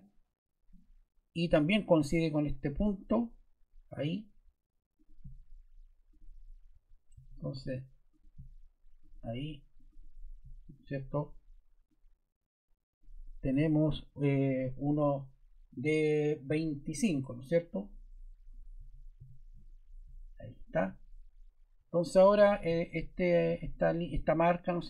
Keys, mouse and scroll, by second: 6.7 ⟲, 7.1 d, 8.1 click, 9.8 click, 11.8 click, 18.7-19.1 typing, 21.7 Escape.